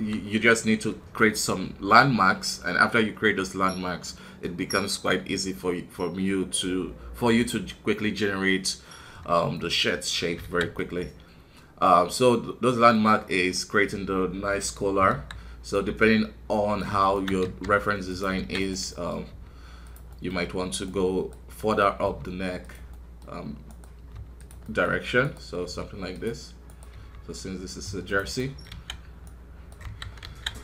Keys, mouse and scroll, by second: 9.5 middle click, 10.1 scroll up 1, 10.4 alt+a, 10.7-15.1 middle drag, 15.1 KP_1, 15.7-17.4 right drag, 17.4 e, 18.6 right click, 18.9 middle click, 19.2 f, 20.1-21.7 middle drag, 21.7 right click, 22.0 f, 22.9-24.0 middle drag, 24.0 f, 24.6-25.6 middle drag, 25.6 f, 26.6 right click, 26.9 f, 28.3 middle click, 28.7 alt+a, 29.2 right click, 29.8 KP_1, 30.2 alt+a, 30.5-30.6 scroll down 2.